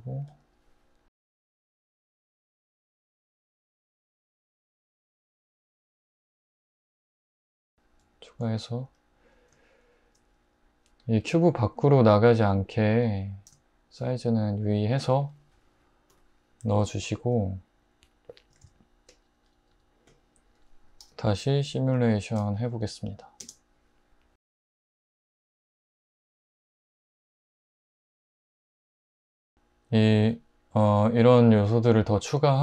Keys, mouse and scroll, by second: 1.1-6.5 typing, 8.0-10.5 drag, 13.0 scroll, 16.1 scroll, 18.6 alt+z, 19.7 Tab, 21.0 h, 23.4 space, 29.3 space, 29.5 click.